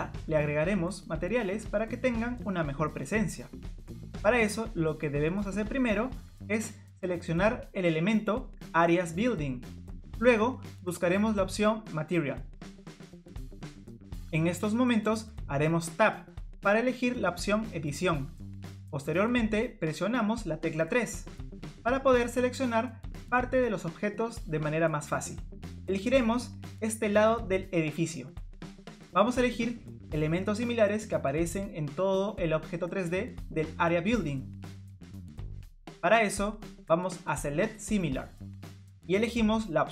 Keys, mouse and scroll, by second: 4.5 scroll up 1, 5.4-7.7 scroll down 1, 7.7 click, 9.1 middle click, 9.1 scroll up 1, 12.8 click, 15.7 Tab, 20.7 3, 23.9 click, 36.5 click.